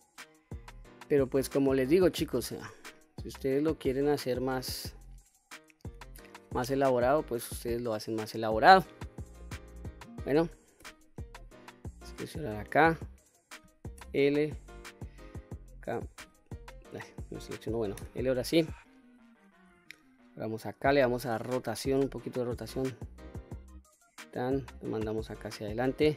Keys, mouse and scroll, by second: 0.4-0.8 scroll down 1, 0.9 middle click, 1.5-2.3 scroll down 1, 2.3 q, 2.8-3.8 middle drag, 3.9 scroll down 1, 4.2-5.8 scroll up 4, 5.8-6.2 scroll down 1, 6.5-7.7 scroll down 5, 7.7-8.8 scroll up 3, 9.1 scroll down 1, 9.6 middle click, 10.6 3, 11.2 middle click, 12.5 click, 13.8 l, 14.9 middle click, 16.0 l, 16.9 click, 17.8 l, 18.4 middle click, 19.5 KP_1, 20.0-20.9 scroll up 1, 21.1 r, 23.8 click, 24.5-25.7 drag.